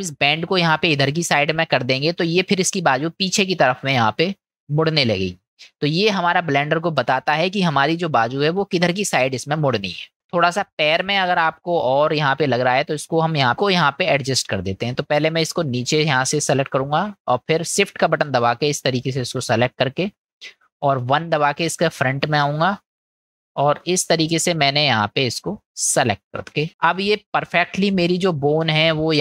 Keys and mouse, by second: 5.6 middle click, 7.3 middle click, 10.0 middle click, 10.4 shift+middle click, 13.4 click, 14.2-15.6 drag, 18.1 shift+click, 19.1 shift+click, 21.2 KP_1, 23.4-25.8 drag, 28.6-29.2 middle drag.